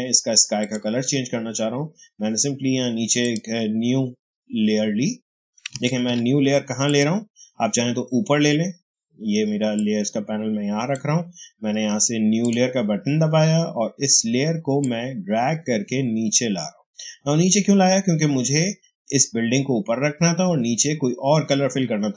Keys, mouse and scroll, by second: 3.1 click, 5.9 ctrl+z, 6.8 click, 9.7-12.3 drag, 14.7-18.6 drag.